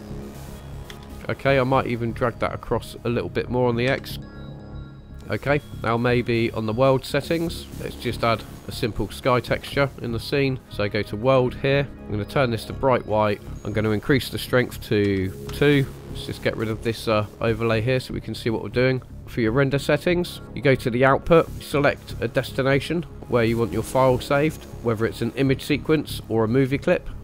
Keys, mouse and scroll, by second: 0.9 space, 1.3 click, 2.1 click, 3.8 g, 4.3 x, 5.1 ctrl+shift+click, 5.7 click, 6.5-7.6 drag, 7.7-8.8 drag, 10.5-11.1 drag, 11.9 click, 13.7-15.5 drag, 16.7 click, 17.8-18.1 scroll up 2, 18.3 scroll down 2, 20.4 scroll down 2, 21.6 scroll down 3.